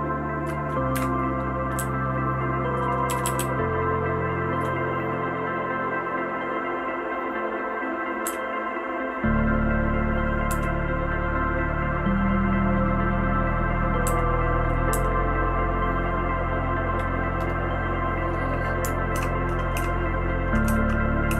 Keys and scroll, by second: 0.9 *, 1.7 Down, 2.2-2.7 Down, 3.0 Down, 3.2 Down, 3.4-4.5 Down, 8.2 Down, 10.5 Down, 14.0 Down, 14.9 Down, 19.1-21.3 typing.